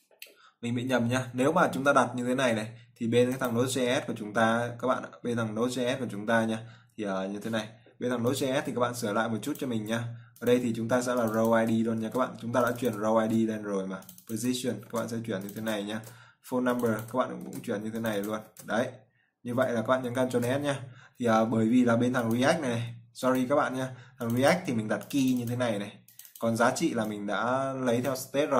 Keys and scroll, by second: 12.6 ctrl+c, 13.7 ctrl+v, 15.4 ctrl+c, 16.5 ctrl+v, 18.0 ctrl+c, 19.0 ctrl+v, 20.6 ctrl+s.